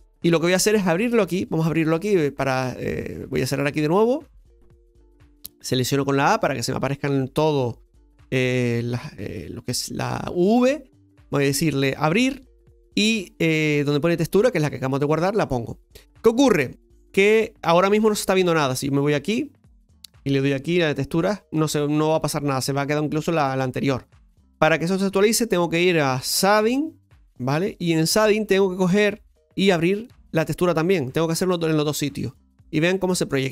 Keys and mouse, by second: 2.5 click, 5.4 a, 11.4 click, 26.4 click, 29.2-32.8 drag, 32.8-33.5 middle drag.